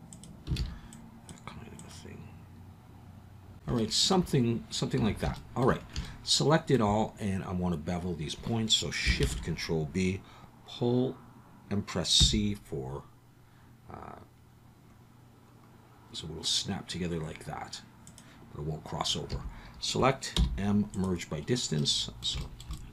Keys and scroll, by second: 0.6 alt+a, 5.0 a, 9.2 ctrl+shift+b, 12.2 c, 19.3 a, 20.3 m.